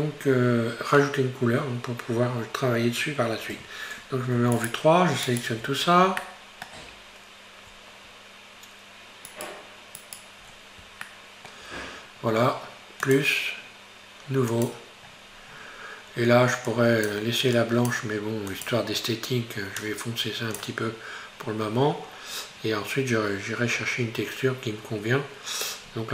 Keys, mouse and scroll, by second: 0.2-2.9 scroll up 1, 3.6 3, 4.6 shift+right click, 5.3 shift+right click, 5.6-6.3 shift+scroll down 2, 6.3-7.8 shift+middle drag, 7.8-8.2 scroll up 1, 9.3 shift+right click, 10.0 shift+right click, 10.5-11.2 scroll down 3, 11.2-13.1 shift+middle drag, 13.1-15.1 drag, 15.1-16.7 scroll down 10, 16.7-18.7 drag, 21.4-24.2 scroll up 2, 24.3-25.9 scroll up 1, 25.9-26.1 scroll up 4.